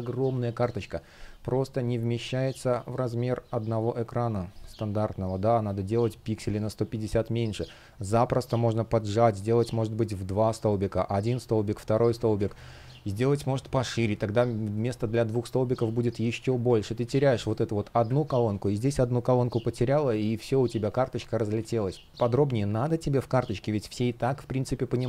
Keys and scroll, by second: 11.9 super+z, 16.4 super+z, 18.2 space, 21.1 super+z, 23.7 space.